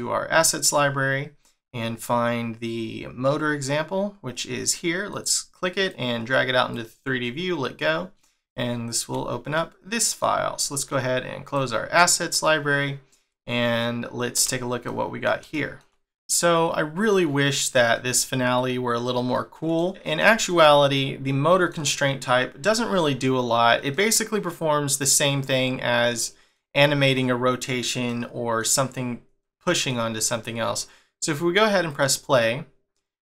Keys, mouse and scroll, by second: 0.6 scroll down 1, 1.6 scroll up 1, 3.8-4.3 scroll up 2, 5.1 click, 5.9 click, 17.9 middle click, 23.9 middle click, 28.1 middle click, 29.9 middle click, 31.9 click.